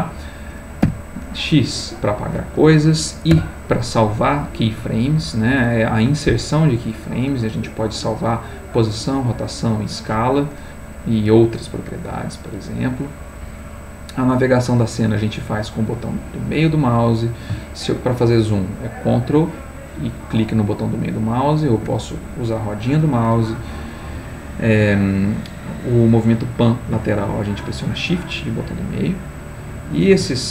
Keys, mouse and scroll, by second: 0.8 x, 3.3 i, 13.7-16.9 middle drag, 18.6-22.1 ctrl+middle drag, 28.0-30.1 shift+middle drag.